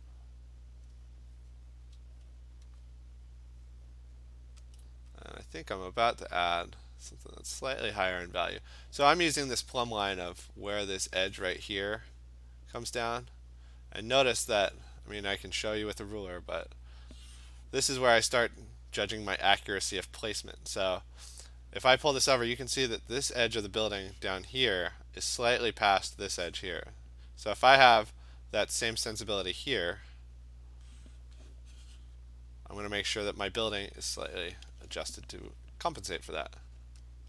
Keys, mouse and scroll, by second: 0.1 alt+click, 4.7 alt+click, 4.9 alt+click, 5.7 click, 6.0 click, 6.1 alt+click, 34.7 click, 37.0 click.